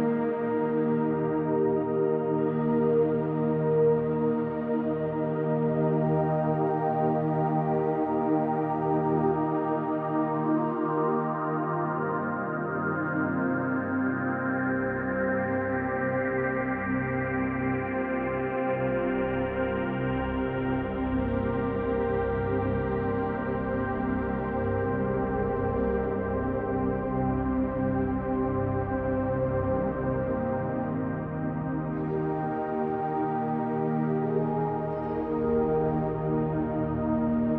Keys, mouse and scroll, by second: 0.7 KP_1, 1.0 KP_0, 1.1 KP_0, 1.3 Return, 6.4 click, 7.5-9.1 drag, 9.6 click, 10.7 click, 13.0 click, 14.8 click, 16.2 alt+click, 17.4 click, 18.4 click, 20.1 ctrl+alt+click, 22.2 click, 22.8 click, 23.9-27.6 typing, 28.6 alt+click, 30.6 typing, 30.6-33.1 ctrl+alt+drag, 33.8 click, 34.1 click, 35.2 click, 36.6-37.5 drag.